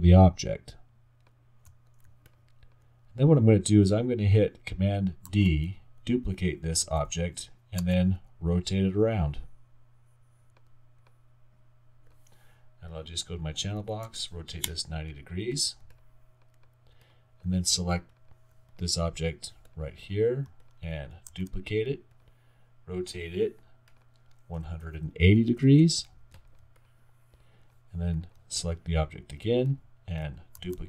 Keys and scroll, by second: 5.3 super+d, 7.8 e, 9.0 e, 13.8 typing, 14.7 Return, 21.3 super+d, 24.7-25.8 typing, 27.2 typing, 30.6 super+d.